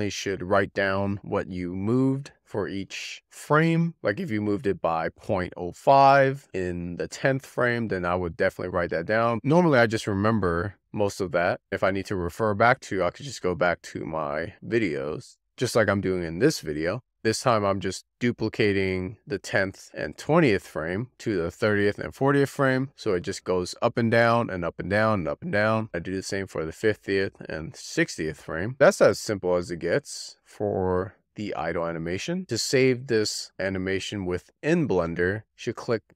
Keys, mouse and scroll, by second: 1.5-5.2 drag, 5.2 BackSpace, 6.8 x, 16.2-17.5 drag, 17.7 shift+d, 21.4-21.9 drag, 21.9 shift+d, 23.9-24.4 drag, 24.4 shift+d, 26.2 shift+d, 27.1-32.2 drag, 32.4-32.9 drag, 35.7 click.